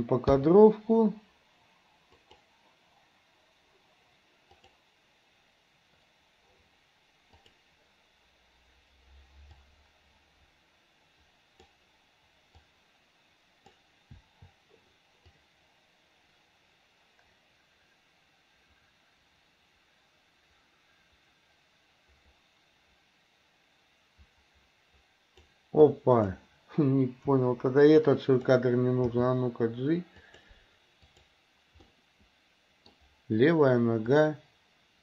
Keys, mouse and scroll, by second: 0.4 i, 2.2 click, 4.6 click, 7.5 click, 9.5 click, 9.8-11.7 drag, 12.8-13.8 drag, 14.2 i, 15.4-25.6 drag, 26.0 click, 27.4 Delete, 28.0 click, 29.1 g, 31.2 click, 31.9-33.0 middle drag, 34.2-35.0 drag.